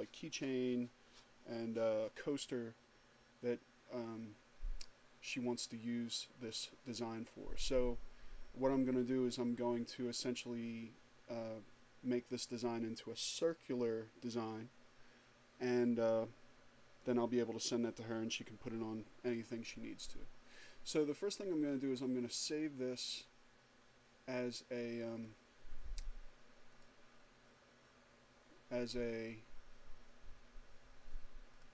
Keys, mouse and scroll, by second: 25.4 click, 27.0 click.